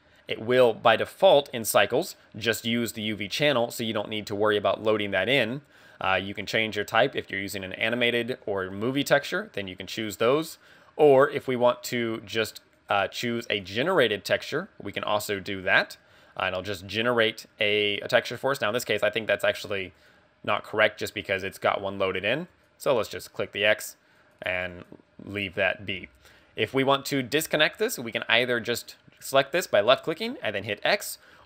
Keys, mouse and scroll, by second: 1.4 click, 5.5 click, 6.5 click, 12.9 click, 14.2 click, 19.6 click, 22.5 click, 23.2 click, 24.3 click, 28.4 click.